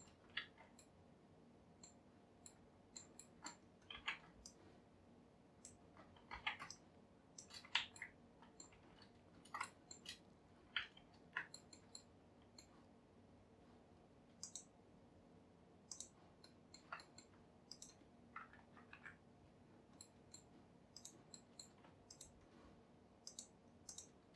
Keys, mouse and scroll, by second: 0.5 alt+z, 0.8-4.0 middle drag, 4.0 b, 7.9 alt+z, 8.0 middle click, 8.7 f, 9.7 shift+middle click, 10.2 scroll up 3, 11.6-14.5 shift+middle drag, 14.5-16.5 drag, 16.5-17.7 middle drag, 17.7 click, 18.5 KP_Enter, 19.0 KP_Decimal, 19.7-20.1 scroll down 4, 20.1 middle click, 21.0 click, 21.5 middle click, 22.1 shift+click, 23.3-24.3 drag, 24.3 scroll up 1.